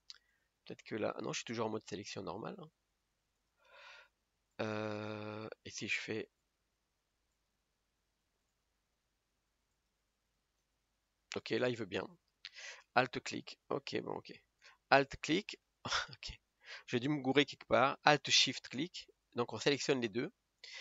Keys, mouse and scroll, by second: 3.5 click, 4.7 shift+click, 7.5 alt+shift+click, 8.7 click, 11.0 middle click, 11.6 scroll up 1, 12.0 scroll down 2, 12.3-13.3 middle drag, 13.3 alt+click, 13.8 middle click, 14.2-15.3 scroll up 1, 15.3 alt+click, 15.7-16.0 scroll up 2, 16.0-18.9 middle drag, 18.9 alt+shift+click, 19.9-20.5 scroll down 2, 20.5-20.8 middle drag.